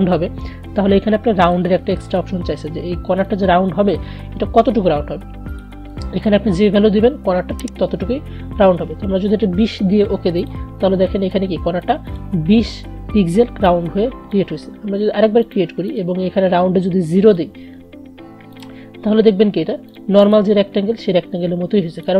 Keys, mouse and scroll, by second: 1.0-7.4 drag, 10.5-22.1 drag.